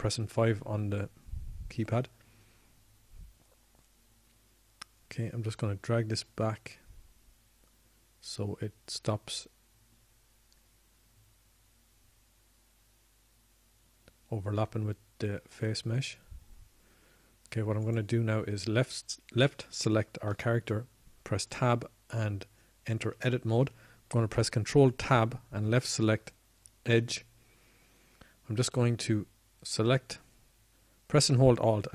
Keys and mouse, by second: 0.1 KP_5, 5.0-6.7 middle drag, 23.6 Tab, 25.2 Tab, 27.6 ctrl+Tab, 29.7 ctrl+Tab.